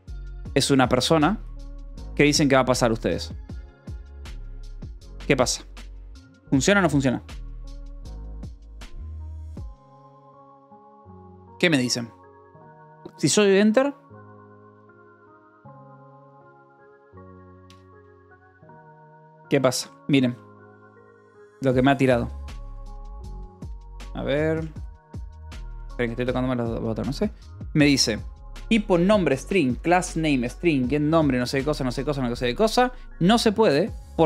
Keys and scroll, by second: 0.0-2.7 typing, 18.0 Escape, 19.3 ctrl+super+s, 20.0 j, 21.1 Escape, 21.4 j, 22.1 k, 22.9 d, 23.5 j, 24.6 d, 25.4 k, 25.8 d.